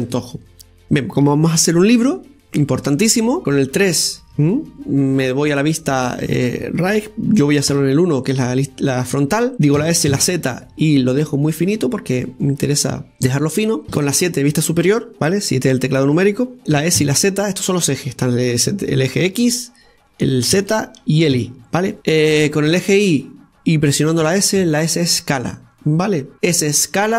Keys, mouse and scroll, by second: 0.6-2.1 scroll down 4, 3.4 KP_0, 4.2 KP_3, 5.7-8.6 scroll up 1, 8.6 KP_1, 10.7 s, 13.8-14.8 middle drag, 14.8 KP_7.